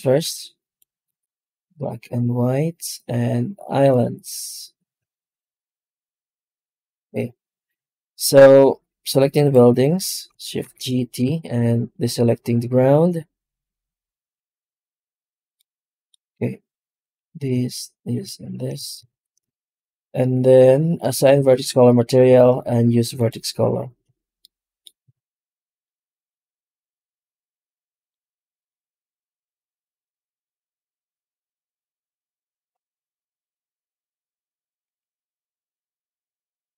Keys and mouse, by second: 6.9 alt+a, 9.3 right click, 10.5 shift+g, 11.3 shift+right click, 11.6 right click, 15.5 middle click, 16.9 click, 17.5 shift+click, 18.0 shift+click, 19.0 ctrl+shift+x, 23.9 alt+a, 24.4 middle click, 25.0 alt+a, 25.3 middle click, 25.9 ctrl+s, 29.6 middle click, 33.6 click, 34.0 click, 34.8 shift+a.